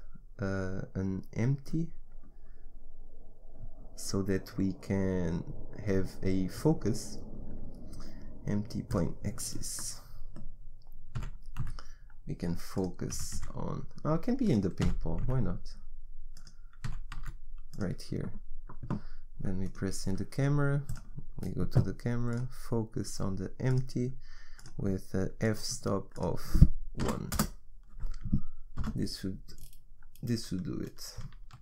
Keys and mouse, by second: 9.6 middle click, 9.8 middle click, 10.0 middle click, 10.2 middle click, 11.3 g, 13.3 g, 15.0 g, 17.0 g, 24.7-28.9 middle drag, 28.9 KP_0.